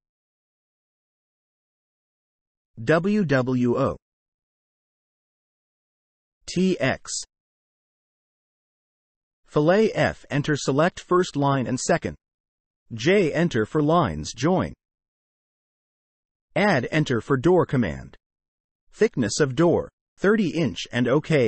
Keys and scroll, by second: 1.0 w, 1.7 space, 2.6 6, 3.0 Return, 5.4 space, 6.2 t, 6.6 space, 9.0 Escape, 9.2 space, 11.9 Delete, 12.7 j, 12.9 space, 14.2 space, 16.3 a, 16.7 space, 19.2 3.